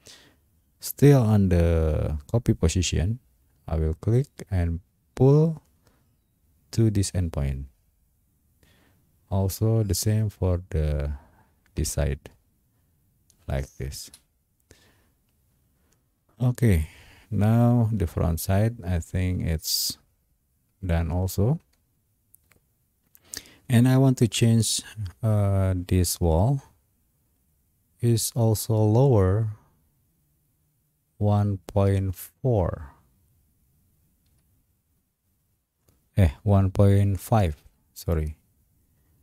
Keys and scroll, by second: 14.1 space, 18.4 space, 36.5-37.4 typing, 37.7 Return.